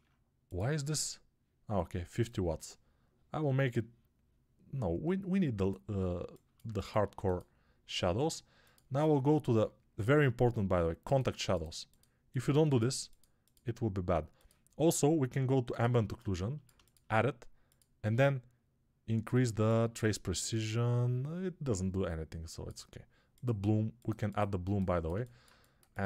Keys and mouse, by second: 6.1-15.9 alt+shift+drag.